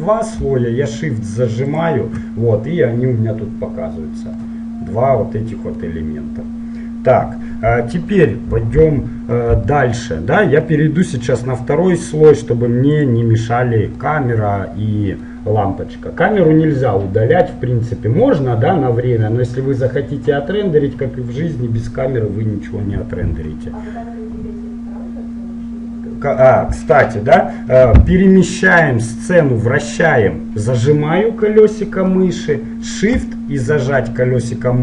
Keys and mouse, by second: 1.7-3.6 drag, 4.6-9.0 middle drag, 9.9-11.1 middle drag, 11.1-14.8 drag, 14.8-19.7 middle drag, 28.6-30.4 middle drag, 34.0-34.8 middle drag.